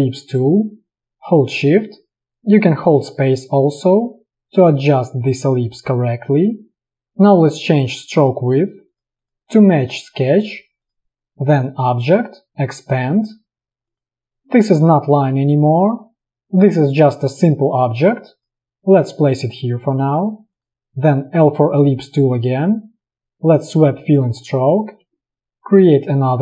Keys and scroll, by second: 3.1 shift+space, 21.5 l, 25.3 shift+space.